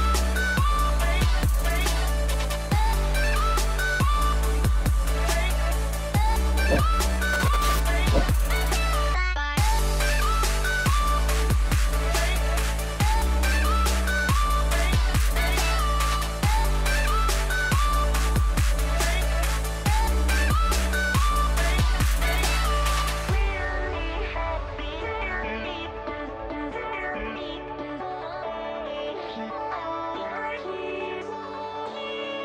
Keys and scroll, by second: 6.9 space, 9.9 space, 12.3 space, 18.3 ctrl+t, 20.1-22.7 typing.